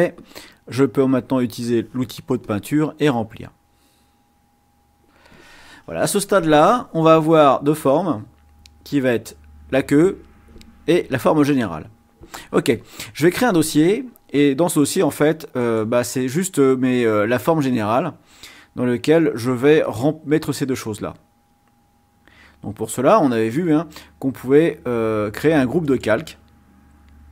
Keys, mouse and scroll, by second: 1.2 click, 2.4 click, 15.0 click, 15.5 right click, 25.7 click.